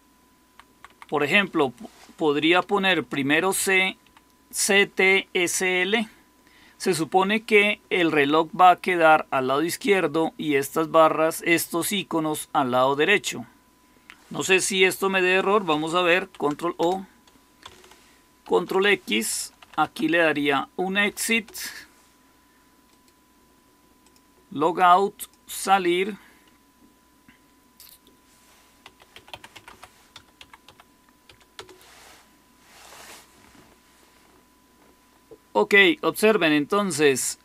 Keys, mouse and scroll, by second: 0.4 Left, 0.6 Left, 0.8 Left, 1.0 Left, 2.8 shift+c, 3.3 Right, 3.5 Right, 3.9 Delete, 16.1 ctrl+o, 16.7 Return, 18.4 ctrl+x, 19.3-20.9 typing, 21.2 Return, 28.5-31.2 typing, 31.5 Return.